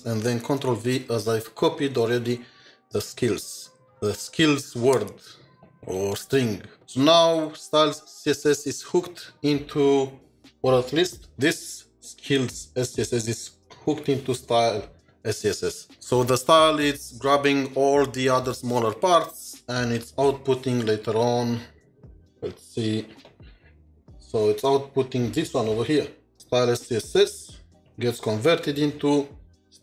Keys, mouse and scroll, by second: 0.4 typing, 11.1 typing, 11.3 ctrl+shift+4, 23.1 ctrl+shift+2, 25.9 ctrl+shift+7, 27.8 ctrl+shift+4.